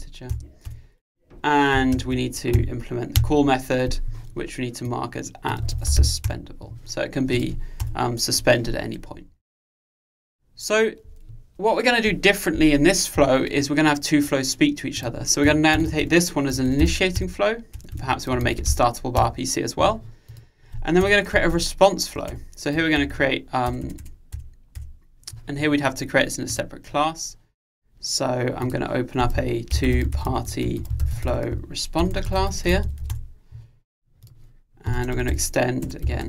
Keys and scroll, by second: 1.9 Return, 2.6 alt+Return, 6.4 Return, 17.3 Return.